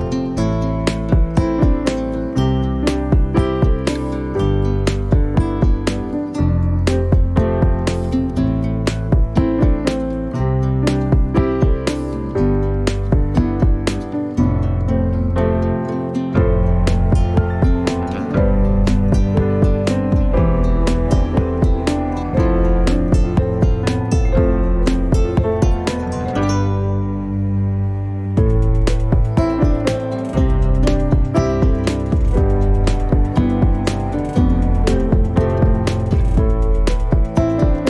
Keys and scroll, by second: 4.9 Return, 5.2 s, 11.2 space, 17.4 b, 34.7 space.